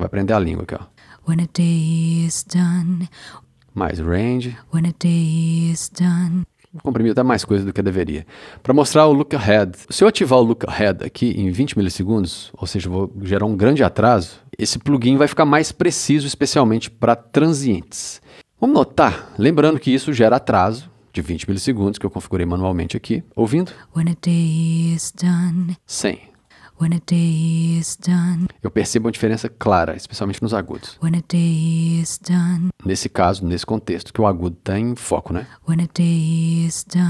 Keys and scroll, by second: 0.9 space, 4.4 space, 6.3 space, 23.7 space, 25.6 space, 28.3 space, 30.9 space, 32.5 space, 35.3 space.